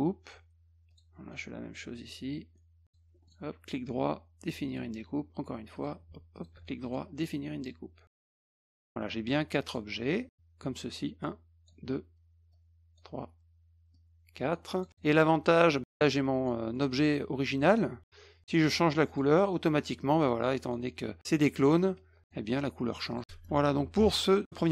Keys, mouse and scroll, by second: 0.9 click, 2.8 ctrl+click, 3.3 right click, 4.7 click, 5.7 click, 6.3 ctrl+click, 6.8 right click, 8.3 click, 9.3-9.7 drag, 10.1-10.6 drag, 11.2-11.7 drag, 12.5-13.0 drag, 13.9 click, 14.7 click, 14.9 click, 15.3-16.5 drag, 16.7 middle drag, 19.1 click, 20.3 click, 21.2 drag, 21.9 click, 23.1 click, 23.2 middle click.